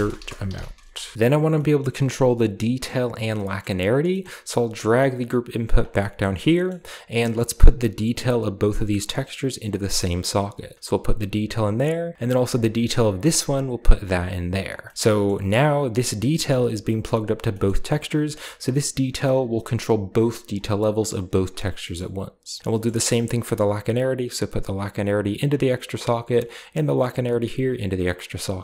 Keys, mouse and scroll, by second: 0.0-1.4 typing, 1.1-1.6 scroll down 1, 1.4-3.2 middle drag, 2.0-3.2 scroll down 2, 3.5 middle click, 4.2-5.6 middle drag, 4.2-5.6 scroll up 1, 4.4 typing, 5.6 click, 6.2-7.2 middle drag, 6.2-7.2 scroll up 1, 10.1-11.3 drag, 13.1-14.4 drag, 14.9-15.2 scroll up 2, 15.2-16.8 middle drag, 17.2-20.8 middle drag, 17.2-20.8 scroll down 1, 20.8 click, 21.8 middle click, 22.8 middle click, 23.3-25.5 drag, 26.6-27.7 drag, 27.9 click.